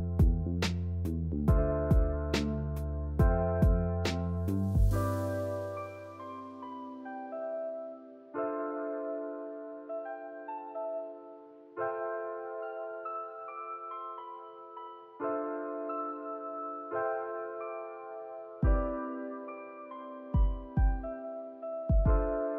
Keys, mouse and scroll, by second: 1.0 shift+middle click, 1.2 scroll down 2, 1.4 shift+middle click, 1.7 e, 2.4 click, 2.7 g, 3.6 shift+click, 3.9 shift+click, 4.2 shift+click, 4.8 g, 6.2 e, 7.3 shift+middle click, 7.8 e, 10.6 scroll down 1, 10.8-11.8 shift+middle drag, 11.9 drag, 12.2-13.2 drag, 13.3 click, 14.0-14.5 middle drag, 14.5 scroll down 1, 14.6 3, 14.8 a, 14.9-15.7 right drag, 15.7 click, 16.0 middle click, 16.9 ctrl+r, 18.1 ctrl+r, 19.7-20.8 middle drag, 20.8 KP_3, 21.3 shift+middle click, 21.5-22.0 scroll up 1, 22.0 ctrl+r.